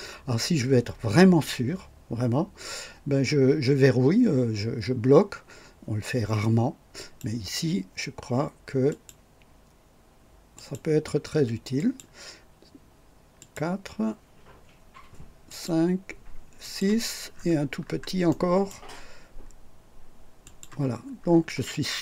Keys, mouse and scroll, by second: 6.9 click, 8.8 click, 10.5 click, 11.7 click, 13.3 click, 15.4 click, 16.6 click, 17.3-18.0 scroll up 4, 18.2 right click, 20.4 click, 21.2-22.0 scroll down 3.